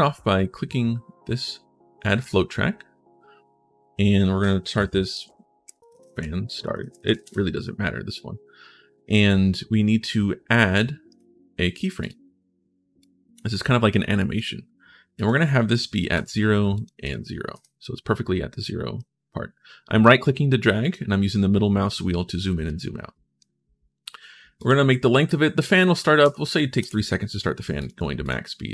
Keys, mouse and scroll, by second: 2.0 click, 4.9-7.4 typing, 10.9 right click, 11.8 click, 12.8-14.1 drag, 14.9 click, 16.6 click, 18.7-20.7 right drag, 20.9-21.3 scroll down 2, 21.5 scroll up 1, 22.0-22.3 scroll down 1, 22.4 right click, 24.4 click, 26.0 3, 27.6 click, 28.0 click.